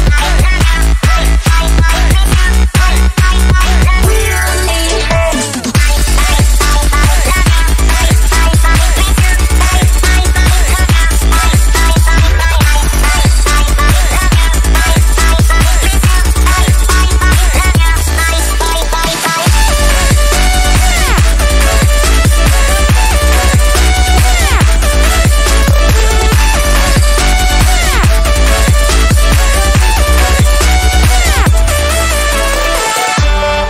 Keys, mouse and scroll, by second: 0.3 click, 6.8 ctrl+alt+shift+e, 8.8-33.6 drag.